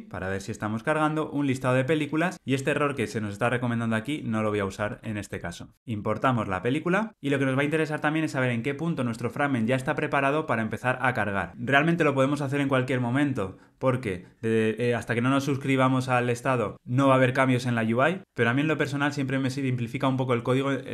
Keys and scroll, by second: 3.5 Tab, 5.7 alt+Return.